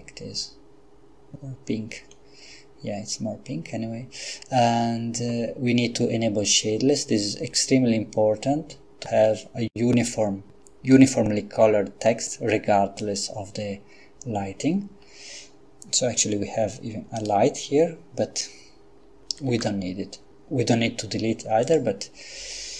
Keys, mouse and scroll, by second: 13.0 click, 17.2 right click, 19.5 x, 21.6 click.